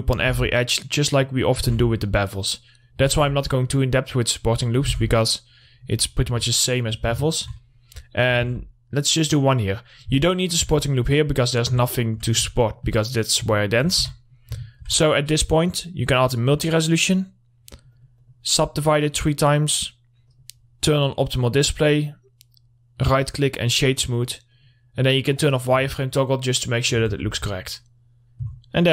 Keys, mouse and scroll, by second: 0.8 ctrl+r, 0.9 click, 2.1 r, 2.5 click, 3.6 ctrl+r, 3.9 click, 5.3 ctrl+r, 5.5 click, 6.4-6.8 scroll down 1, 7.0 alt+middle click, 8.3-8.7 scroll up 1, 8.8 ctrl+r, 9.0 click, 10.7 alt+middle click, 14.5 Tab, 14.6 middle click, 14.8 scroll down 1, 15.1 alt+middle click, 15.9 click, 21.9 right click, 23.7 click, 26.0 scroll down 1, 26.3-27.7 alt+middle drag, 27.7 scroll down 1, 28.0-28.9 alt+middle drag.